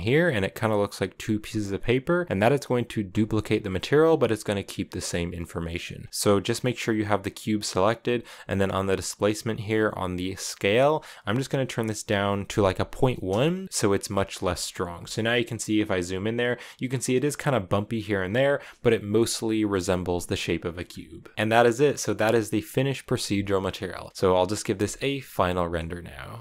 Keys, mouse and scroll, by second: 2.9-6.1 drag, 7.0 right click, 10.2-13.3 drag, 13.8-18.1 scroll up 5, 13.9 shift+middle drag, 14.8 shift+middle drag, 23.4-24.1 scroll up 1, 24.1 a.